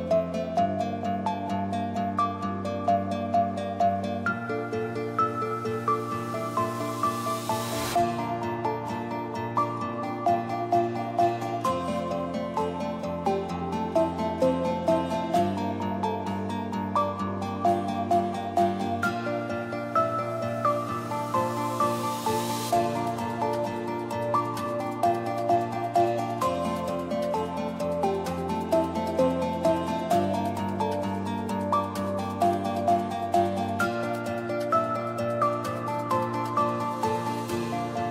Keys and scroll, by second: 10.5-11.5 typing, 13.3-14.2 typing, 25.1 o, 25.2 BackSpace, 26.2 h.